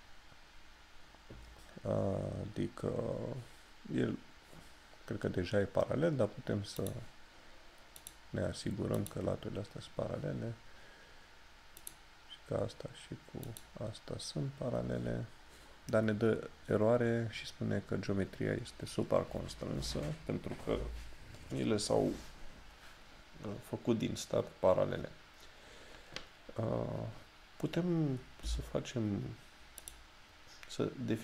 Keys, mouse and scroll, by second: 6.9 click, 11.9 click, 28.5 d, 29.9 click.